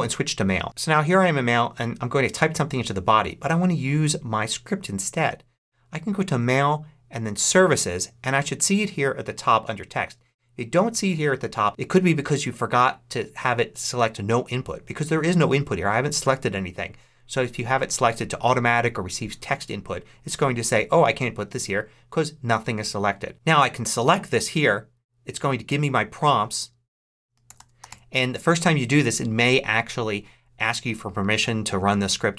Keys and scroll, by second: 0.6 super+Tab, 27.1-28.3 typing.